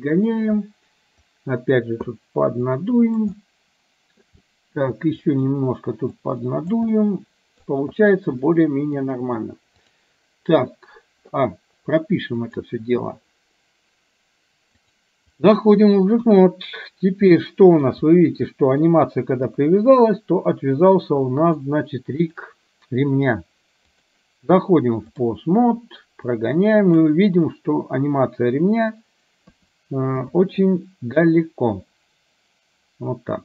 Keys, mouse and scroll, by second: 1.3 click, 2.7 click, 3.5 middle click, 4.6 middle click, 5.2 middle click, 6.2 click, 7.0 middle click, 8.6 middle click, 9.8-11.5 drag, 12.6 click, 15.0 click, 16.3 KP_1, 17.5-17.8 middle drag, 18.6 middle drag, 19.6 KP_3, 21.3-21.7 middle drag, 22.2 click, 24.0-25.5 drag, 26.5-27.1 drag, 29.5 KP_2, 30.2 KP_3.